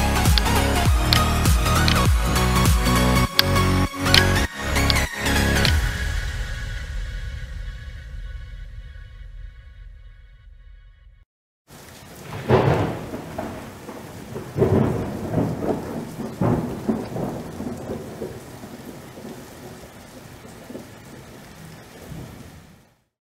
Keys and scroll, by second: 0.6 space, 7.4 ctrl+0.